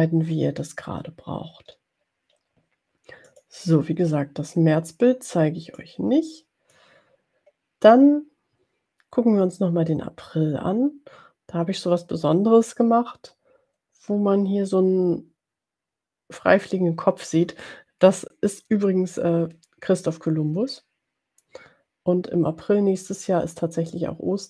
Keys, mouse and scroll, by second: 3.4 click, 6.0-7.6 drag.